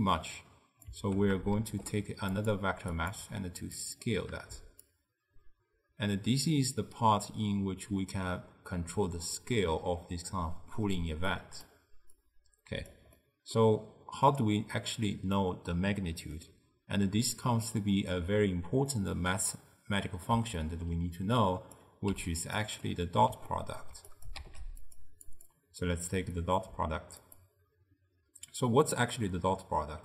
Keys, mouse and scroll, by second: 1.7 shift+d, 3.0-8.0 drag, 11.4 click, 12.2 click, 13.2-17.5 middle drag, 17.5 click, 19.0-21.5 middle drag, 21.5 click, 22.2 g, 22.9-24.2 middle drag, 24.2 click, 24.5 shift+d, 25.3-28.5 drag.